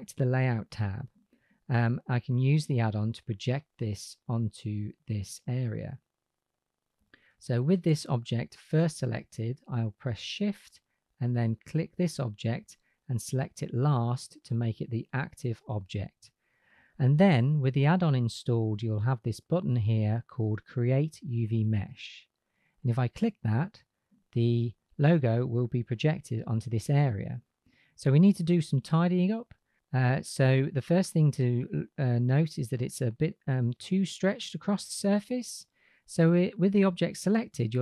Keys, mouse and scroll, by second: 2.6 click, 2.6 right click, 4.6 click, 6.9 click, 23.1 click.